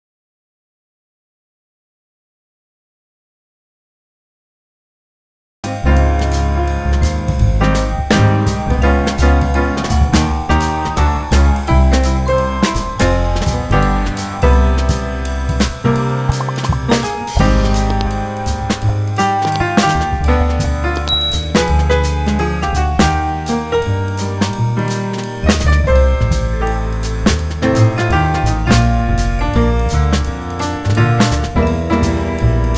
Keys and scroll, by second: 1.9 F3, 2.6 2, 2.9 F4, 4.5 p, 4.8 z, 5.4 F4, 5.9 F4, 7.0 F4, 9.0 F4, 9.9 F4, 10.3 w, 10.9 F4, 12.5 F4, 13.8 F4, 15.4 2, 15.6 F4, 16.8 ctrl+t, 27.6 F4, 28.3 F4, 30.7 ctrl+z, 31.2 ctrl+z, 31.9 ctrl+z, 32.4 F3.